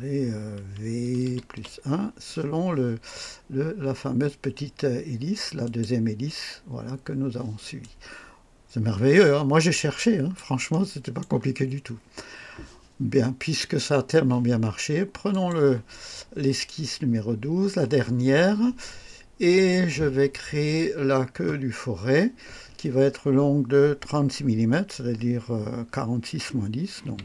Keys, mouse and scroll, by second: 1.2 v, 1.5 KP_1, 5.6 click, 7.8-10.5 drag, 10.7-11.4 right drag, 12.2 scroll down 1, 15.3 click, 19.7 click, 27.0 KP_3.